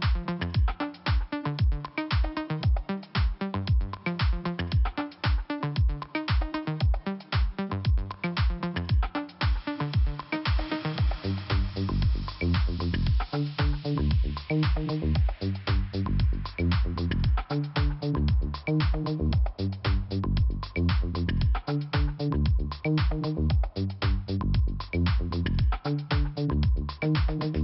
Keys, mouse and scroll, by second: 0.8 scroll down 1, 1.7 click, 3.3 click, 6.6 click, 7.8 click, 9.2 click, 9.9 click, 10.0 click, 11.4 click, 15.2 scroll up 1, 16.8 click, 17.5 scroll up 1, 18.1 middle click, 20.5 click, 21.4 click, 22.2-23.6 scroll down 2, 24.1 click, 27.5 click.